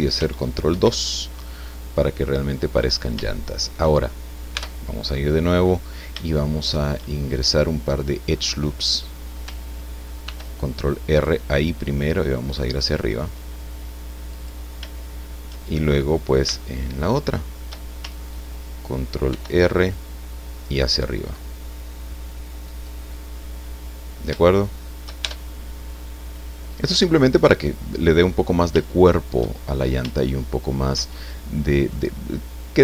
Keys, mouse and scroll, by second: 0.7 ctrl+2, 1.5-2.7 drag, 2.8 scroll up 1, 3.2 shift+click, 4.5 Tab, 5.7-7.1 drag, 7.2 shift+scroll down 1, 7.5 click, 8.6-8.9 scroll up 1, 10.2 ctrl+r, 11.1 click, 14.3 click, 16.5-17.8 shift+middle drag, 19.3 ctrl+r, 19.7 ctrl+click, 22.7 click, 23.6-24.2 scroll down 4, 24.5 shift+click, 25.2 shift+Tab, 26.7 scroll down 2, 28.8 shift+middle click, 29.7-30.0 shift+scroll up 3, 30.1 shift+middle click, 31.1 shift+middle click, 32.2-32.5 scroll up 2.